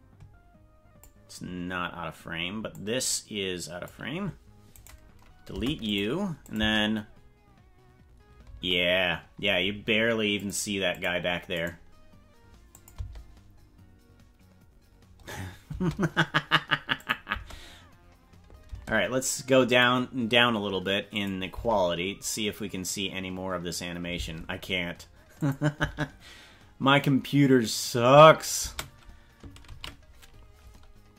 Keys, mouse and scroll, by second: 2.8-4.0 drag, 4.7 right click, 5.5 Delete, 6.5-8.8 drag, 6.6 space, 8.5 space, 10.3 click, 10.9 click, 11.5 right click, 12.8 click, 12.9 space, 15.8 space, 17.0 click, 17.3 space, 18.7 space, 19.8 click, 21.3 click, 21.5 space, 24.2 space, 25.4 click, 25.7 space, 28.7 space, 29.8 ctrl+s.